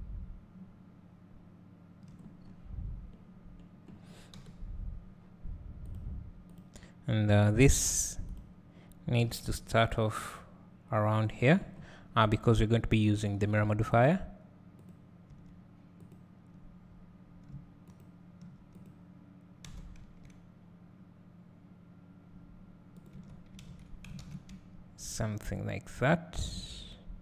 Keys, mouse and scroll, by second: 2.5 scroll up 1, 3.4 scroll down 1, 4.3 KP_7, 6.0 click, 7.6 Tab, 8.3 click, 9.2 g, 14.1 click, 14.9 click, 15.3 Tab, 16.0-18.0 drag, 18.7 click, 19.7 e, 22.9 click, 23.2 Tab, 23.7 alt+a.